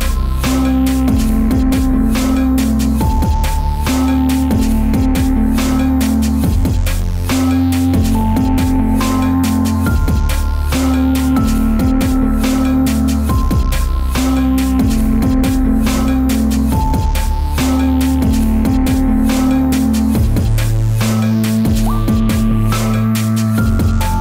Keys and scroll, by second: 13.1 Return, 15.5 Return, 18.5 Return.